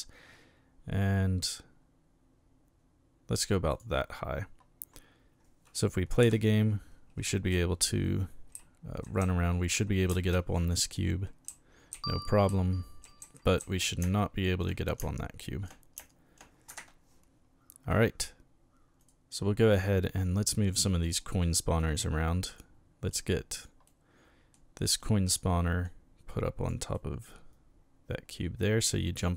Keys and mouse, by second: 3.7 click, 6.2 p, 7.2 d, 8.5 a, 9.2 s, 10.1 s, 10.1 space, 11.5-16.7 typing, 16.7 Escape, 19.0 right click, 20.5-21.2 middle drag, 21.8-22.6 drag, 23.1-23.6 drag, 23.9-24.5 middle drag, 25.0 click, 25.8-26.7 drag, 26.9-29.2 middle drag.